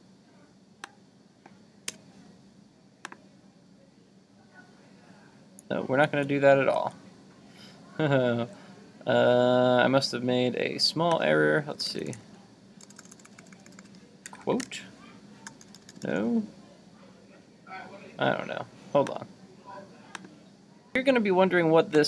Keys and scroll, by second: 6.1 super+z.